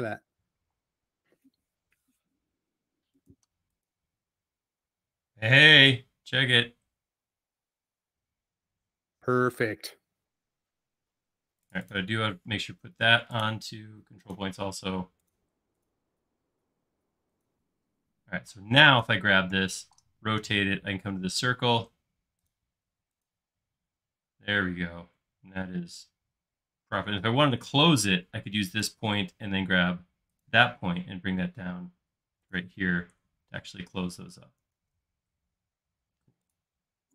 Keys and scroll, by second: 0.6 q, 9.6 Escape, 10.1 space, 19.8 q, 27.5 Escape, 34.8 super+z.